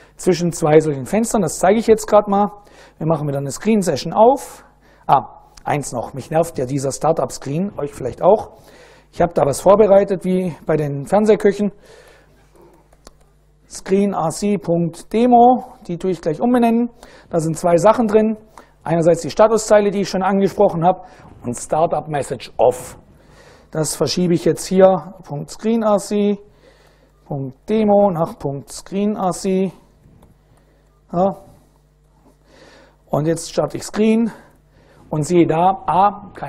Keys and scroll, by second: 1.9 super+Right, 2.4 super+Up, 4.9 Down, 5.9 ctrl+u, 9.4-15.4 typing, 13.7 Tab, 15.7 Tab, 16.4 Return, 23.2-30.7 typing, 26.7 Tab, 31.6 Return, 32.8-34.3 typing.